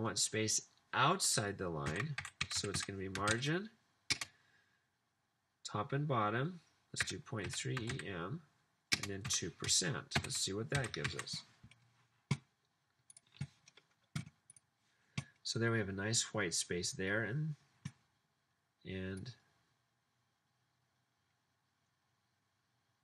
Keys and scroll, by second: 1.8-5.6 typing, 7.1-12.2 typing.